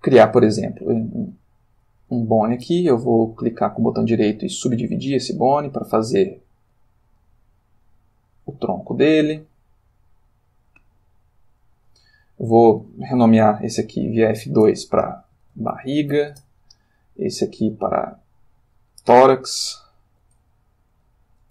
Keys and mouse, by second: 3.4 click, 4.8 click, 5.5 click, 5.9 g, 6.6 click, 7.2 click, 7.4 g, 8.1 click, 9.0 click, 9.0 g, 9.8 click, 10.6 click, 10.7 g, 11.5 click, 14.0 F2, 15.4-16.2 typing, 16.3 shift+Return, 17.8 click, 20.1 F2, 20.9-21.5 typing.